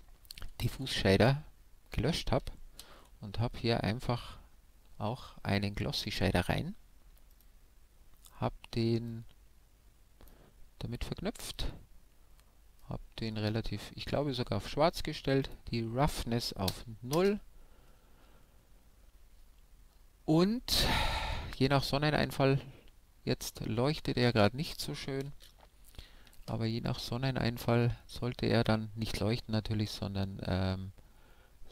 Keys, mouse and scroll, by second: 0.8 x, 2.9 shift+a, 7.5-9.1 drag, 9.2-10.9 drag, 11.5-13.2 drag, 15.5-17.2 drag.